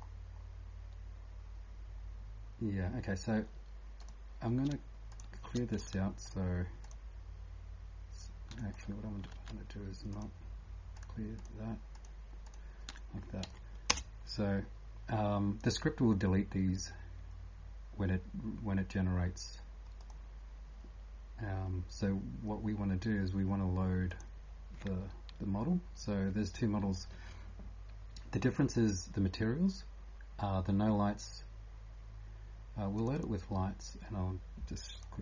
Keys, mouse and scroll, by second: 0.0-0.5 scroll up 8, 0.9-1.4 scroll up 1, 2.2 scroll down 1, 2.2 typing, 3.8-4.5 typing, 4.0 click, 4.0 scroll down 4, 5.1 shift+click, 6.2 ctrl+click, 6.8 ctrl+click, 8.7 ctrl+click, 10.1 click, 11.0 click, 13.4 Delete, 13.9 Return, 24.1 click, 33.2 click.